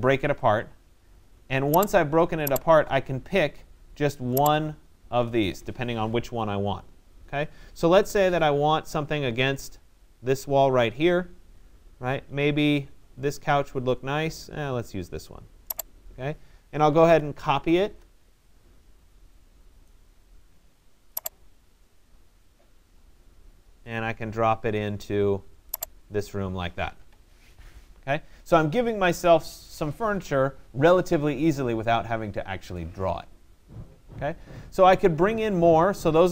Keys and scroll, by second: 6.8 Escape, 16.7 c, 17.9 Return, 26.6 Escape.